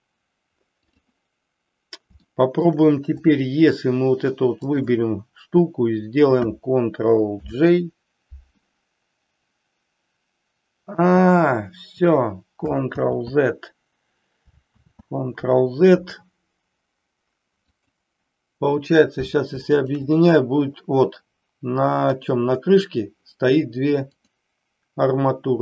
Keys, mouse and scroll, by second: 2.2-2.7 shift+middle drag, 3.2-3.6 drag, 7.3 ctrl+j, 13.0 ctrl+z, 14.7 ctrl+z, 17.7 click, 22.0 click, 24.2 click.